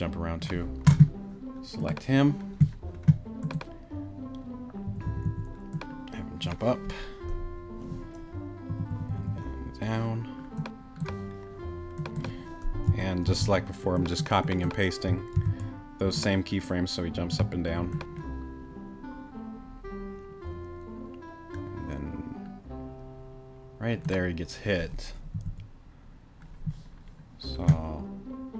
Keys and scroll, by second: 4.9 Right, 8.7 Right, 13.3 super+c, 15.3 super+v, 25.3 Right.